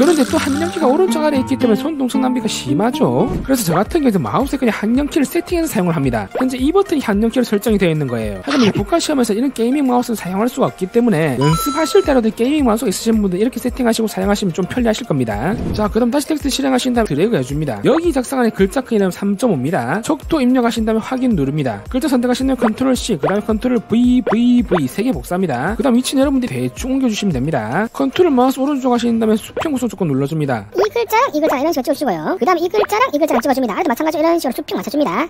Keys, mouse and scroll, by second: 16.4 t, 17.1 click, 20.1 r, 20.4 e, 22.1 click, 22.7 click, 23.3 ctrl+c, 24.2 ctrl+v, 24.6 ctrl+v, 25.0 ctrl+v, 26.5 click, 27.5 click, 28.6 click, 30.4 click, 31.1 click, 32.2 click, 33.0 click, 33.7 click, 34.7 click.